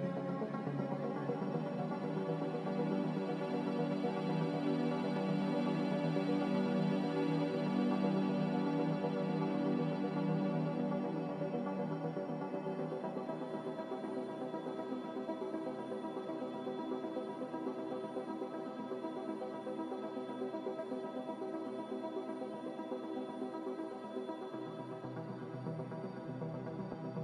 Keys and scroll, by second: 3.1 n, 7.8 b, 11.7 b, 14.4-16.1 typing, 17.9 Return, 21.2 n, 26.0 a.